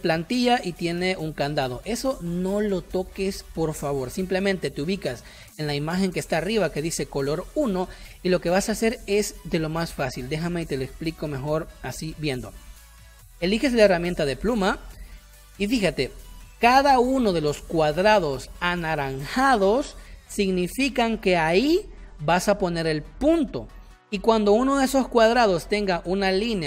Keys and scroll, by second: 12.2 space, 13.1 p, 14.6 space.